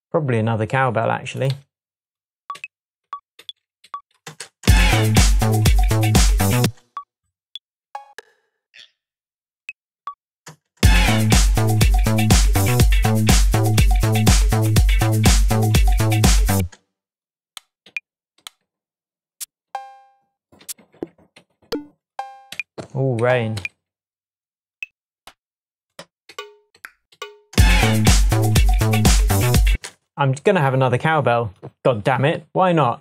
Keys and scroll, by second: 1.5 Right, 2.5 Up, 3.0 Down, 3.8 Up, 4.2 space, 6.6 space, 7.4 Down, 8.1 Down, 9.9 Down, 10.4 space, 16.5 space, 17.8 Down, 18.3 Up, 19.6 Up, 20.6 Down, 20.9 Down, 22.5 Up, 23.2 Down, 23.5 Up, 25.1 Up, 26.3 Down, 27.1 Up, 27.5 space, 29.7 space.